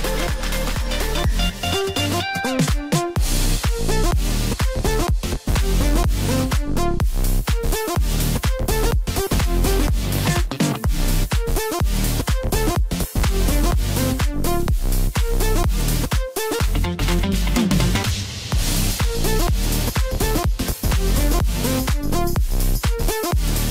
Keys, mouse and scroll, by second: 0.4 s, 2.6-3.3 scroll up 1, 3.3 g, 6.5-7.7 scroll up 1, 7.7 ctrl+b, 10.3 click, 12.0 ctrl+z, 20.3-20.9 scroll down 1, 20.9 scroll down 1, 22.2 click, 22.8-23.7 scroll up 1.